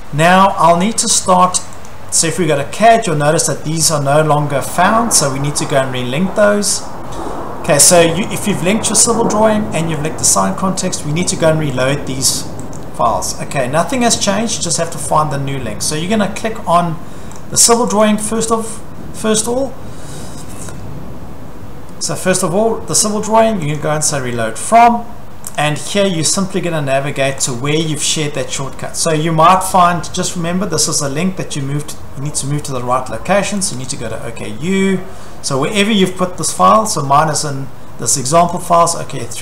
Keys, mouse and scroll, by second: 7.8 click, 8.5 click, 10.1 click, 11.8 click, 12.4 click, 12.8 click, 14.9 click, 17.4 click, 18.0 click, 23.8 click, 25.6 click, 27.5 click, 33.7 click, 33.8 click, 36.7 click, 36.8 click, 38.5 click, 38.7 click.